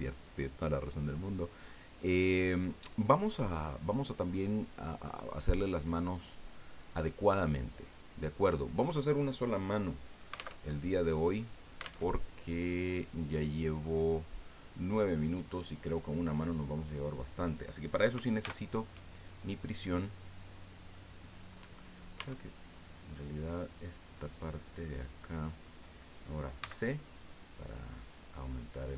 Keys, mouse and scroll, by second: 10.5 alt+Tab, 12.0 alt+Tab, 12.9 click, 14.5 click, 15.7-16.0 scroll down 2, 18.4 alt+h, 20.9-21.7 middle drag, 21.8 right click, 22.1 Tab, 23.4 middle click, 25.2 click, 26.6 c, 27.0-28.9 drag.